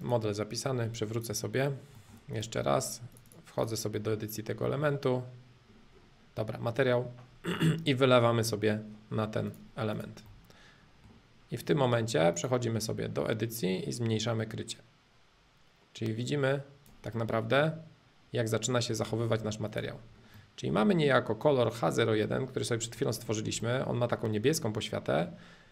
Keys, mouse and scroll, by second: 0.0-1.9 drag, 1.9 middle click, 2.3 click, 2.6 middle click, 3.1 click, 3.9-8.3 middle drag, 9.5 click, 10.2-12.2 middle drag, 12.4-14.3 drag, 17.1-19.0 middle drag, 19.0 space, 19.7 click, 20.1-22.3 middle drag, 23.3-25.7 shift+middle drag.